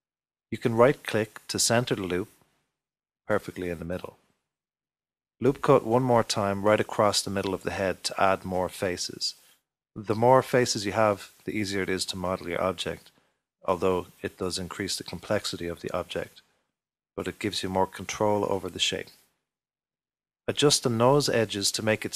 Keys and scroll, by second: 4.7 ctrl+r.